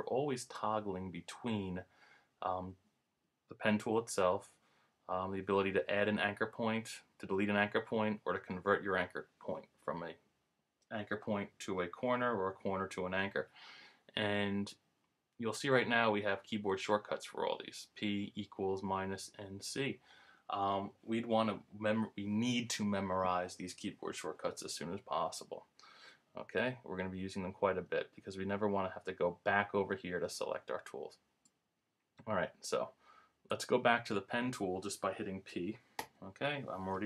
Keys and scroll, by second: 36.0 p.